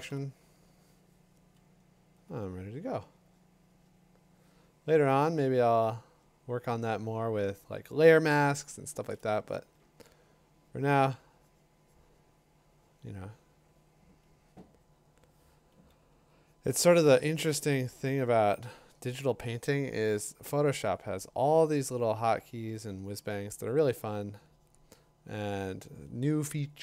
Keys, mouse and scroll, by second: 0.1 b, 0.9-1.5 ], 9.8 [, 15.7 [, 16.1 [, 16.8 ], 17.0 ], 21.7 click, 23.3 click.